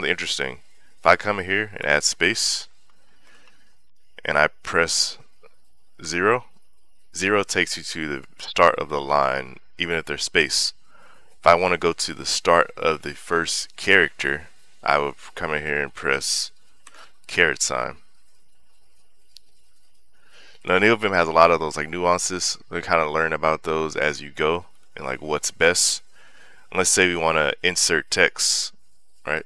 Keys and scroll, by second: 0.9 i, 1.6 space, 3.7 Escape, 5.8 0, 17.2 ^, 20.4 0, 24.1 h, 24.5 j, 25.1 h.